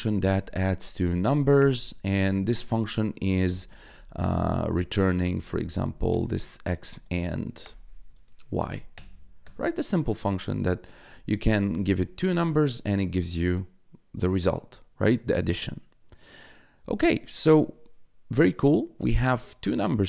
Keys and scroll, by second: 0.0-1.6 typing, 1.8 Tab, 2.9-8.3 typing, 8.9 Return, 10.0-11.8 typing, 12.3 Return, 19.4 1.